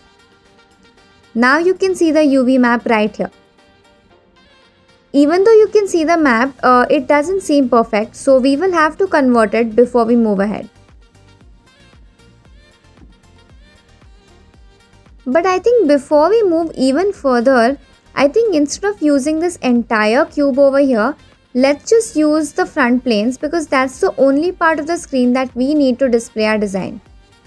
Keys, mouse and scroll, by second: 2.5-3.2 scroll up 3, 12.8 click, 13.6 click, 14.6 shift+click, 18.6 scroll up 2, 19.2-20.3 middle drag, 20.8-27.4 shift+middle drag.